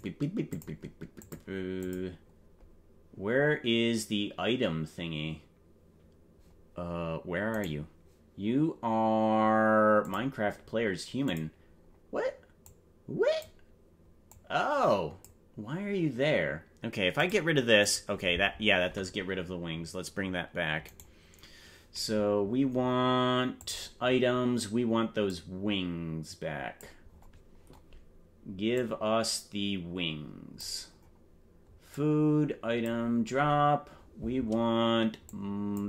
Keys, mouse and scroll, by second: 0.5 click, 1.1 click, 1.8 click, 7.6 right click, 10.0 click, 11.2 click, 11.8 scroll down 1, 12.6 click, 14.3-15.5 drag, 17.3 click, 18.7 click, 21.0 right click, 23.6 click, 24.2 scroll down 1, 25.2-26.8 drag, 27.2-28.0 scroll down 9, 28.7-30.6 drag, 30.8-31.4 scroll down 2, 31.9 click, 33.2 scroll down 1, 33.6 scroll up 4, 35.2 click.